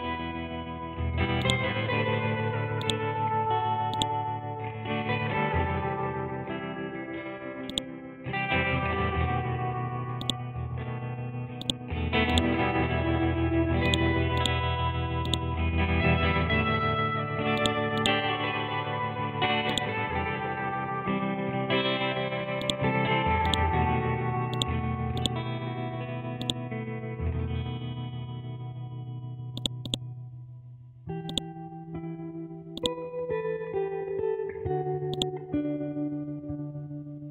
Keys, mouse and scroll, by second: 1.4-2.8 drag, 4.7 Up, 6.3-7.2 scroll down 1, 7.7-10.2 drag, 16.3 scroll up 1, 17.5 click, 18.3 Left, 19.3 ctrl+z, 19.7 alt+click, 21.2 Left, 21.9 scroll down 1, 22.6 click, 22.9 scroll up 1, 23.4-28.3 drag, 28.3 scroll down 1, 29.5 click, 30.1 scroll down 1, 30.7 scroll up 1, 31.3 click, 31.6 scroll down 1, 32.7 click, 33.3-35.1 scroll up 1, 35.1 click.